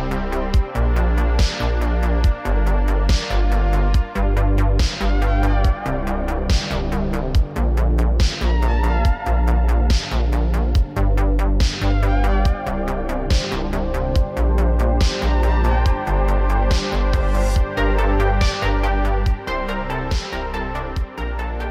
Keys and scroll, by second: 0.1 n, 0.6 a, 1.3 KP_Decimal, 7.2 shift+e, 15.6 KP_0, 15.7 KP_0.